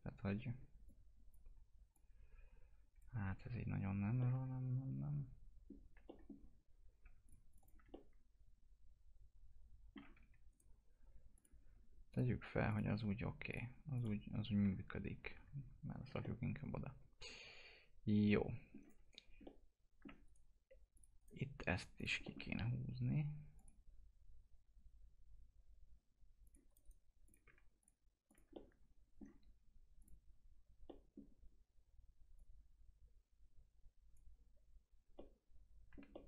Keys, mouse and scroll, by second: 0.4-0.9 scroll up 1, 0.9 click, 3.3 ctrl+z, 4.2-6.1 alt+middle drag, 6.1 middle click, 7.3 click, 7.9-10.1 alt+middle drag, 10.1 1, 10.5 right click, 11.4 click, 15.2 ctrl+z, 16.0 scroll down 1, 16.2-19.4 alt+middle drag, 19.4 alt+middle click, 20.3 right click, 21.0 click, 21.2 right click, 22.0 click, 22.3 alt+middle click, 22.6-23.6 scroll up 1, 23.6 click, 26.4 click, 26.7 right click, 27.3 click, 28.5-30.0 alt+middle drag, 30.0 click, 30.9 middle click, 32.4-35.2 drag, 35.2 alt+middle click, 36.1 middle click.